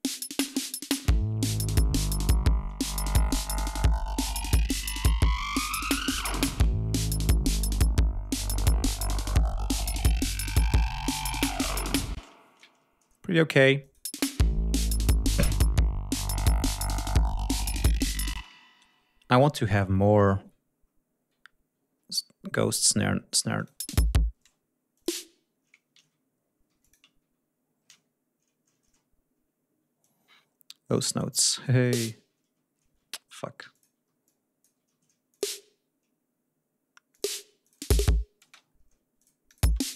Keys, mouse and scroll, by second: 0.3 ctrl+scroll down 2, 1.5 ctrl+scroll down 2, 1.9 ctrl+scroll up 2, 3.5 ctrl+scroll up 2, 6.9 ctrl+scroll down 2, 7.2 ctrl+scroll up 2, 8.0 scroll down 2, 12.1 space, 12.8 ctrl+scroll down 2, 13.2 ctrl+scroll up 2, 13.7 click, 14.0 space, 14.4-15.7 scroll up 4, 14.6 d, 15.7-16.3 ctrl+scroll down 2, 16.5-18.0 ctrl+scroll up 3, 18.3 space, 19.1 ctrl+scroll down 2, 20.4-21.0 ctrl+scroll down 3, 21.9-22.5 ctrl+scroll up 4, 23.5 click, 23.7 space, 24.3 space, 24.9 click, 25.9 ctrl+y, 26.6 g, 26.7 shift+click, 27.9 shift+d, 28.7 ctrl+scroll up 2, 29.9-31.5 drag, 31.7 click, 32.9 ctrl+shift+y, 33.6 click, 33.6 g, 34.2 alt+click, 34.9 alt+d, 35.2 alt+click, 37.0 click, 37.5 click, 37.7 space, 38.4 space, 38.6-38.9 ctrl+scroll down 2, 39.1 ctrl+click, 39.4 ctrl+click, 39.6 space.